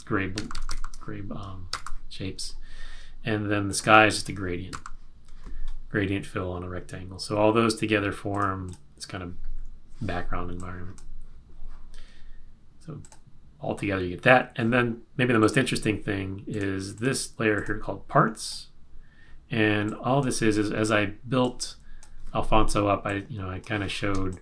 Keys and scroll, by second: 0.3 super+-, 1.8 super+=, 4.7 super+-, 24.2 space.